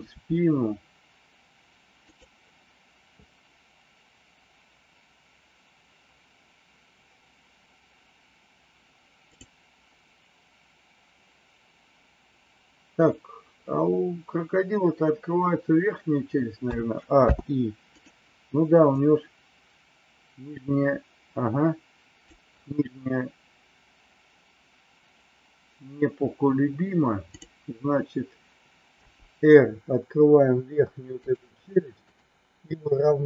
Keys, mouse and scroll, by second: 0.2 r, 9.3 click, 16.7 a, 17.2 i, 19.0-22.3 drag, 27.3 click, 28.9 r, 32.0 click.